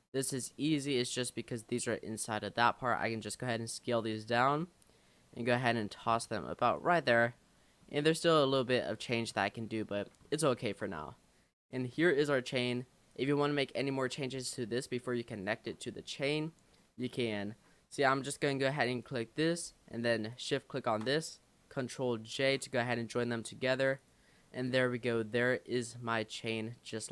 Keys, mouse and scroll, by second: 0.1 scroll up 5, 0.4 shift+middle click, 0.9-2.0 scroll up 1, 3.0 s, 4.5 g, 7.0 Tab, 7.5-8.1 scroll down 5, 8.1 middle click, 8.5-9.0 scroll up 1, 9.0-9.9 scroll down 17, 9.9 middle click, 10.8-11.5 shift+scroll down 6, 11.6-13.1 middle drag, 13.1 click, 13.5-13.9 scroll up 2, 13.9 click, 15.3 shift+click, 15.9-16.3 scroll down 2, 16.3 click, 16.9-17.4 middle drag, 17.4-17.9 scroll up 2, 17.9-18.7 scroll up 2, 19.0 click, 20.3 shift+click, 22.4 ctrl+j, 22.8-23.3 scroll down 10, 24.0 click, 24.4 scroll up 3, 24.7 click, 25.7-27.1 drag.